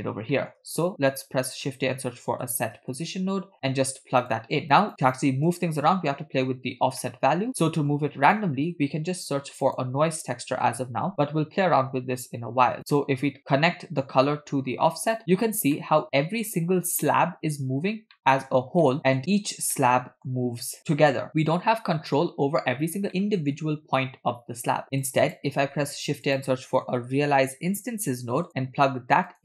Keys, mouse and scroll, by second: 0.4 middle click, 0.8 shift+a, 4.9 click, 5.5 click, 6.8 scroll up 1, 7.0 middle click, 7.6 middle click, 8.9 shift+a, 13.3-15.2 drag, 15.8-16.7 middle drag, 17.8 scroll down 1, 18.1-18.5 middle drag, 18.8-19.2 middle drag, 19.2 scroll up 2, 19.8 middle click, 21.4-22.0 middle drag, 23.1 shift+middle click, 25.0 click, 25.6 shift+a.